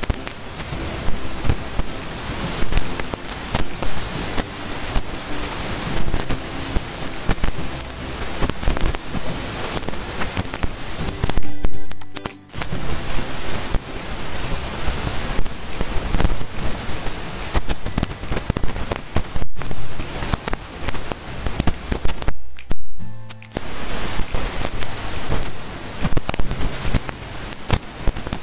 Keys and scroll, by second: 0.6 ctrl+a, 28.1 ctrl+a.